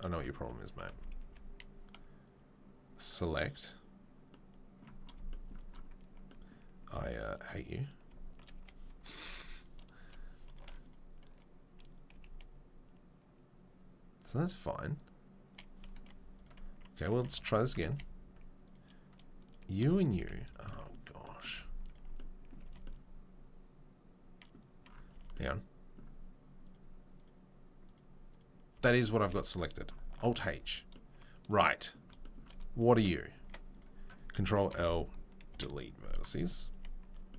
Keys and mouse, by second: 0.4 Tab, 0.6 Tab, 0.9 a, 1.2 a, 7.3-9.5 middle drag, 9.2 a, 9.2 3, 9.5 click, 9.6-10.8 middle drag, 10.6 2, 10.8 click, 10.9-33.7 middle drag, 12.1 g, 16.3 click, 16.3 3, 17.2 Tab, 17.6 Tab, 17.8 a, 19.9 shift+click, 20.2 z, 21.5 z, 22.6 a, 25.2 Tab, 28.7 Tab, 29.2 a, 30.2 alt+h, 33.3 1, 33.7 click, 33.8-37.3 middle drag, 34.8 ctrl+l, 35.5 Delete, 36.7 Tab, 37.0 Tab.